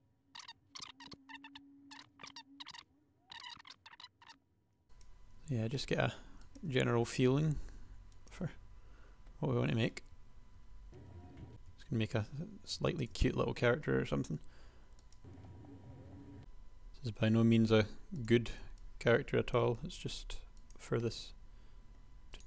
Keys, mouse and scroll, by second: 0.0-1.1 typing, 2.3 shift+click, 2.4 g, 4.2 click, 4.4 s, 4.6 g, 4.7 s, 5.5 g, 7.0 e, 8.5 KP_3, 10.4-11.4 typing, 14.0 e, 15.2 KP_3, 15.3 a, 15.8 e, 16.0 a, 17.3 e, 18.5 a, 20.1 g.